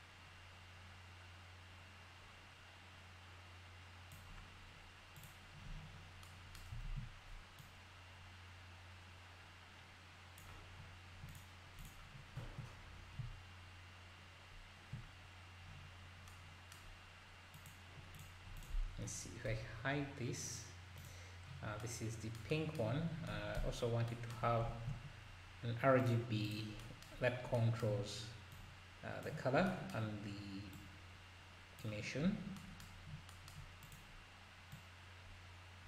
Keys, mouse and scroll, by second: 5.2 click, 6.9 ctrl+s, 7.6-11.9 drag, 10.9 scroll down 1, 12.2-13.2 scroll down 7, 17.5 click, 18.2 click, 18.6 click, 19.5 h, 21.0 click, 24.4 scroll down 2, 24.7 shift+a, 28.5-29.7 drag, 30.7-32.3 drag, 32.3 scroll up 3, 33.8 click, 34.7 click.